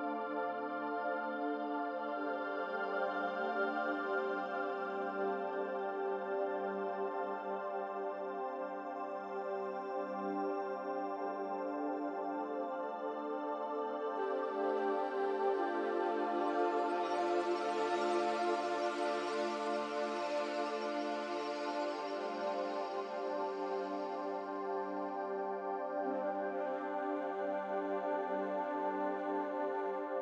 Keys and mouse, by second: 0.1 e, 4.0-6.7 middle drag, 6.1 click, 7.8 Tab, 8.5 click, 10.2-11.1 middle drag, 11.7-14.4 middle drag, 15.9-16.6 middle drag, 17.7 Tab, 19.2 click, 21.4 ctrl+r, 24.6 ctrl+r.